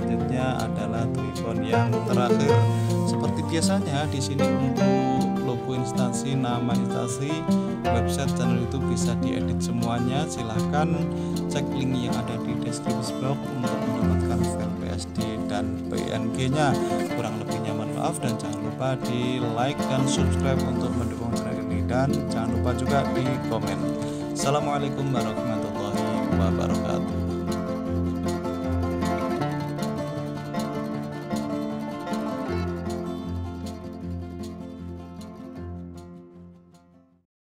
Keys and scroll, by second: 0.4 t, 11.6 1, 22.4 s.